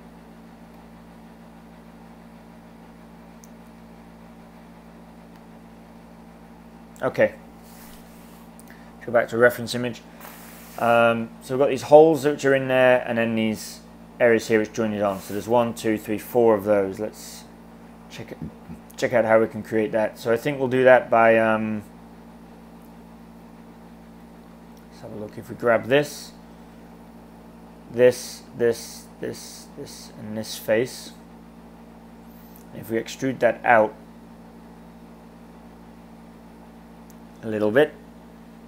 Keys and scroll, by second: 0.7 s, 33.1 e.